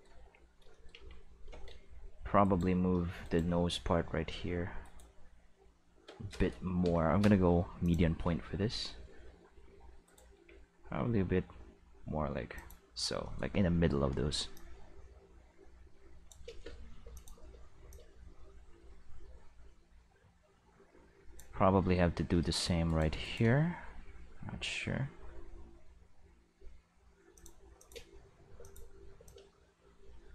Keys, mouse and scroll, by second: 0.0 middle click, 0.2 q, 1.0 Tab, 2.4 right click, 3.2 shift+right click, 3.9 g, 4.8 right click, 6.8 ., 7.8 click, 8.2 g, 10.0 right click, 10.3 g, 12.6 click, 14.5-16.3 drag, 16.5 space, 17.0 space, 17.1 click, 17.3 space, 17.8 space, 17.9-21.4 drag, 22.9 right click, 23.2 shift+right click, 23.6 g, 27.3 click, 27.8 click, 27.9 space, 28.6 space, 28.6 click, 28.8 space, 29.2 space, 29.2-30.3 drag.